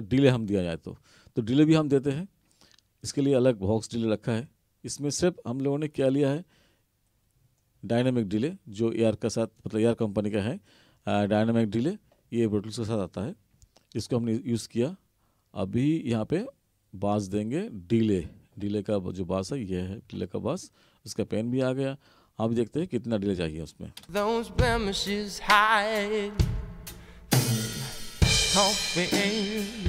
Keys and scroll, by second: 24.1 space.